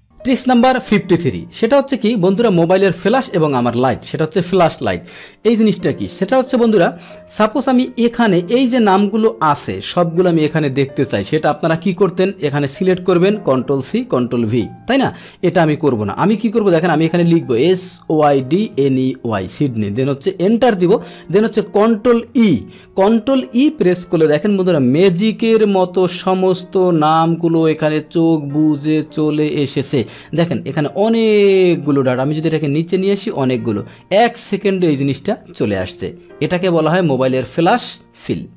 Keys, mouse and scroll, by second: 2.2 click, 8.9 click, 10.5 click, 12.1 click, 13.1 ctrl+shift+Down, 15.4 click, 25.3-27.8 middle drag, 27.8-30.2 scroll down 2, 31.9-35.2 drag.